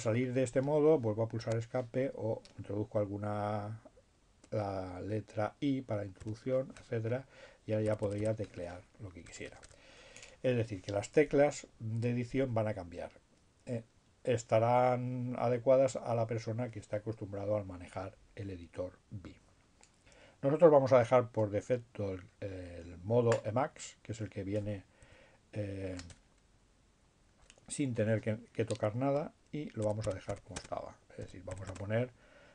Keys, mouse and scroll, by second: 0.3 Escape, 4.6 i, 4.9 d, 8.9 BackSpace, 21.3 Up, 25.7 BackSpace, 29.6-31.7 typing.